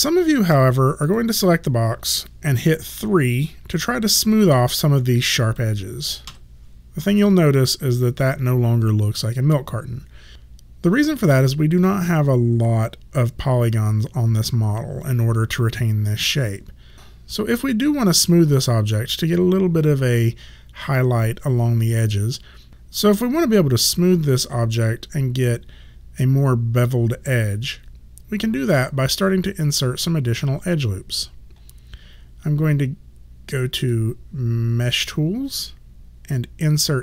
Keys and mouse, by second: 1.1 click, 4.3 click, 6.4 3, 34.0 click.